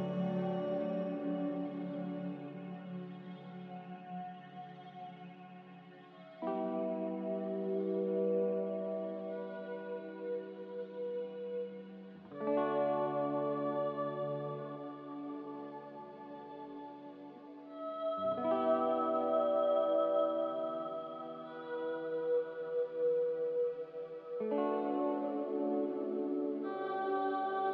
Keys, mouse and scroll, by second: 0.4 ctrl+z, 1.2 ctrl+z, 1.8-2.7 typing, 4.6-5.3 typing, 7.2 ctrl+z, 7.5 ctrl+z, 7.9 ctrl+z, 12.9 typing, 13.0 Return, 25.1-25.9 typing.